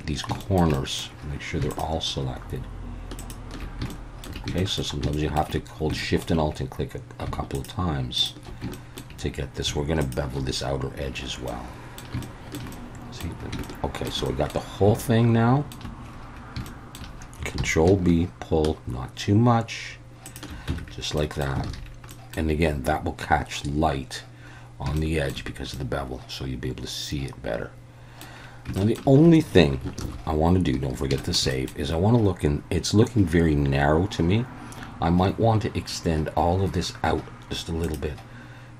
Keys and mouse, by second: 0.4 shift+middle click, 0.7 middle click, 1.8-3.6 alt+shift+drag, 3.9 shift+middle click, 4.6 shift+middle click, 5.1 shift+middle click, 6.0 shift+middle click, 7.5 alt+shift+click, 8.7 shift+middle click, 11.5 middle click, 12.2 shift+middle click, 12.7 middle click, 13.6 shift+middle click, 14.2 middle click, 15.0 shift+middle click, 16.7 shift+middle click, 17.6 ctrl+b, 20.3 shift+click, 20.7 Tab, 21.2 middle drag, 21.7 alt+a, 22.1 middle click, 25.0-25.3 shift+middle drag, 25.7-28.2 middle drag, 28.8 shift+middle drag, 30.0 ctrl+s, 31.2 shift+middle click, 31.5 middle click.